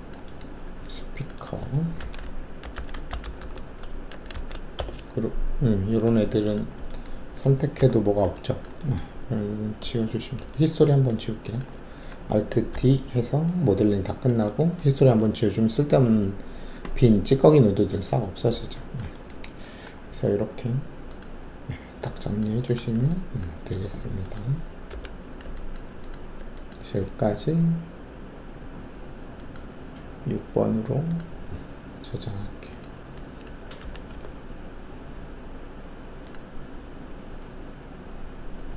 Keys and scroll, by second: 2.0 alt+s, 2.6-4.3 typing, 4.7 Return, 7.7 alt+4, 12.7 alt+d, 24.8 alt+5, 33.8 Delete, 34.1 6.